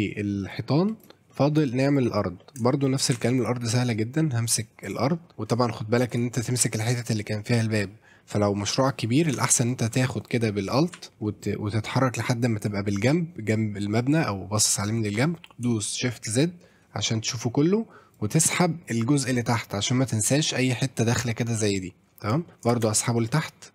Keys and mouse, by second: 0.5 click, 0.9 click, 0.9 right click, 1.3 middle drag, 1.9 click, 2.4 middle drag, 2.7 shift+middle drag, 3.1 Tab, 3.4 click, 4.6 click, 4.8 click, 5.1 middle click, 6.1 shift+click, 9.5 alt+middle click, 11.3 alt+middle click, 11.5 alt+middle click, 11.9 alt+middle click, 16.3 shift+z, 18.1-19.4 drag, 20.5 middle click, 22.5 middle click, 22.7 shift+d.